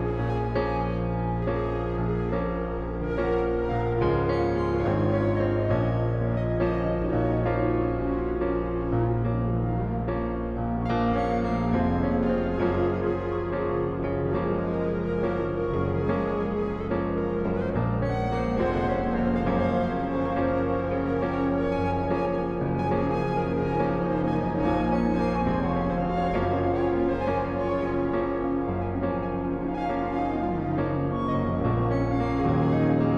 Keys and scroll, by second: 13.3 ctrl+alt+z, 13.8 ctrl+shift+z.